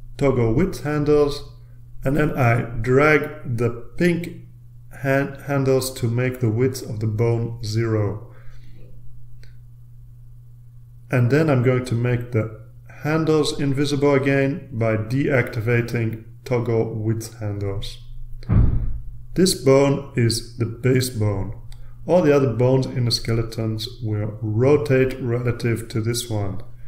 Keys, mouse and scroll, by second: 0.1 click, 2.4-4.2 drag, 4.9 click, 13.2 click.